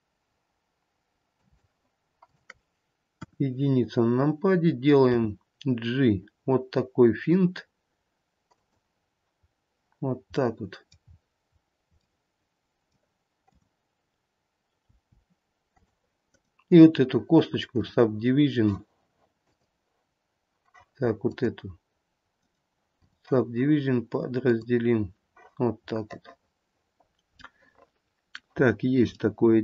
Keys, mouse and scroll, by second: 2.4 click, 3.5 KP_1, 5.4 g, 9.7-10.5 scroll up 1, 10.5 scroll up 3, 10.6 middle click, 11.3-11.8 scroll down 1, 12.1 scroll down 3, 12.2 middle click, 13.7 click, 15.1 g, 16.5 right click, 19.8 click, 21.6 click, 22.6 right click, 24.7 click, 26.2 middle click, 27.0 middle click, 27.0 scroll down 2, 27.3 scroll up 1, 27.6 middle click, 28.7-29.5 scroll up 2, 29.5 middle click.